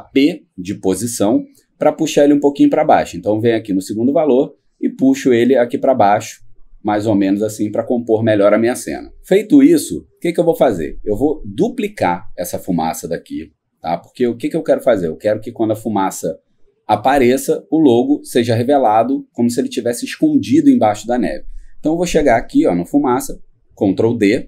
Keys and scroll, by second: 14.2 ctrl+d.